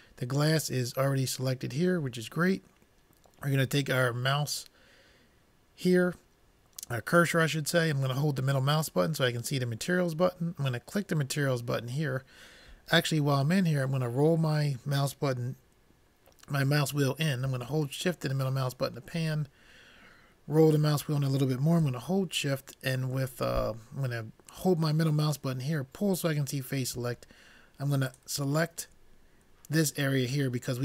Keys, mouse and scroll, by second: 8.5-10.0 middle drag, 10.9-12.7 drag, 13.9 middle click, 18.5-21.0 middle drag, 25.0-26.8 middle drag, 28.1-30.8 drag.